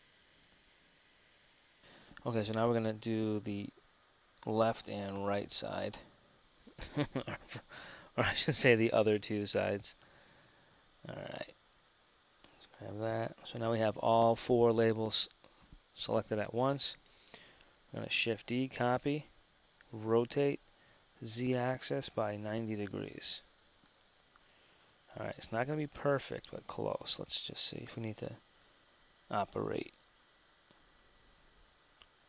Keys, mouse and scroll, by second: 7.2 super+z, 12.8-14.9 drag, 18.4 shift+d, 31.9 z.